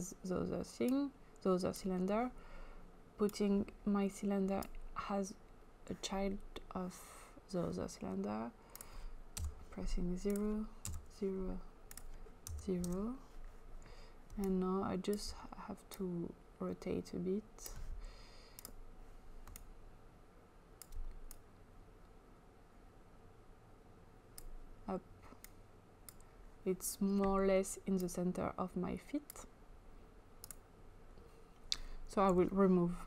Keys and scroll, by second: 9.4 typing, 10.8 typing, 12.6 typing, 12.8 Return, 32.3 Delete.